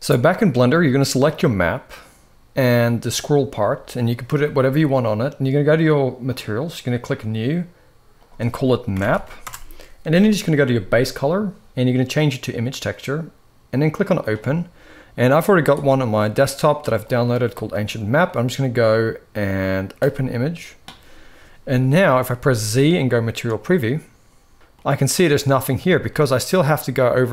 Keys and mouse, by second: 6.1 click, 8.0-9.2 drag, 10.8-12.2 drag, 13.6 click, 22.2 z, 25.6 shift+middle click.